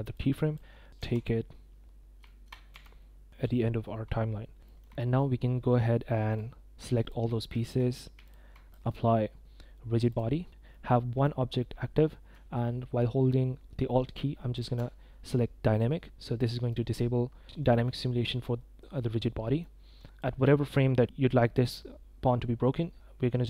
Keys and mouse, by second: 0.1-0.5 drag, 1.0 f, 2.3 shift+click, 2.7 g, 4.6 shift+drag, 4.9 drag, 6.3-7.0 drag, 7.6 shift+click, 8.7-10.1 drag, 10.7-11.2 drag, 14.5 alt+click, 16.3 click, 17.6 click, 17.6 middle drag, 18.9-19.6 middle drag, 20.0 click.